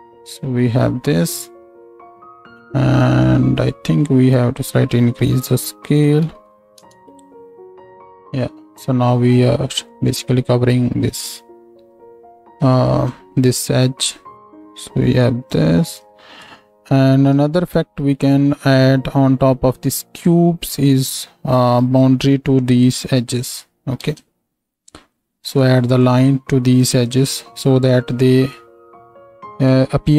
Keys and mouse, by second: 24.0 ctrl+space.